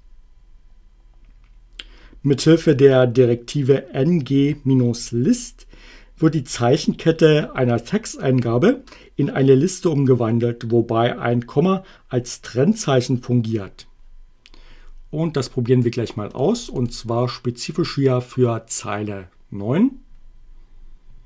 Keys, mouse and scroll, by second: 16.4 click.